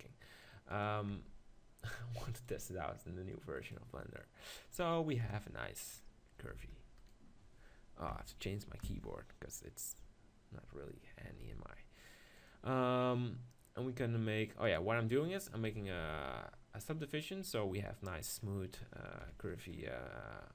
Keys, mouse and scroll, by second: 1.1 Tab, 5.2 KP_7, 6.5 Tab, 7.0-8.4 drag, 8.4 right click, 10.0-11.9 middle drag, 11.4 ctrl+r, 16.0 ctrl+z, 17.9-19.9 middle drag, 19.3 KP_7.